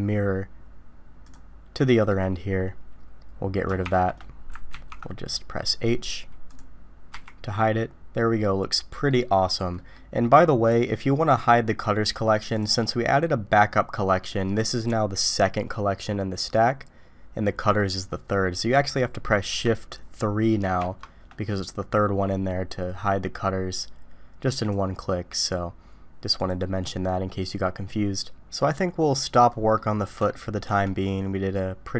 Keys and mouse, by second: 1.3 click, 1.9 middle click, 3.9 shift+2, 4.7 ctrl+z, 7.1 h, 7.5-9.1 middle drag, 9.7 middle drag, 12.5 click, 18.8 middle click, 20.8 shift+3, 24.5 click, 26.4 click, 28.6-29.7 middle drag, 30.3-30.7 shift+middle drag.